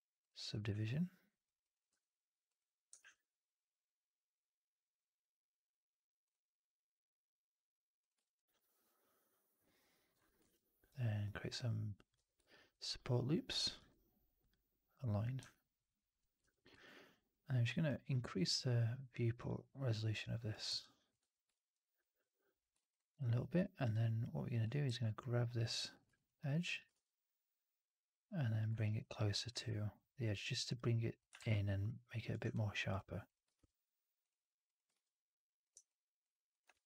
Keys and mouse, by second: 0.7 alt+click, 1.5 alt+click, 2.4 click, 2.9 shift+Tab, 8.1 alt+middle click, 8.3 alt+right click, 8.4-10.0 alt+drag, 10.3 shift+f, 10.9-12.0 drag, 12.0 w, 13.7 alt+x, 15.4 alt+click, 16.3 4, 16.6 alt+click, 20.7 alt+click, 21.1 1, 21.4 middle click, 21.9 click, 22.8 right click, 23.7 click, 24.7 shift+s, 26.0 alt+click, 26.6 click, 26.8 shift+s, 28.7 click, 29.3 click, 31.1 click, 32.4 alt+click, 33.2 click, 35.7 alt+click, 36.4 click.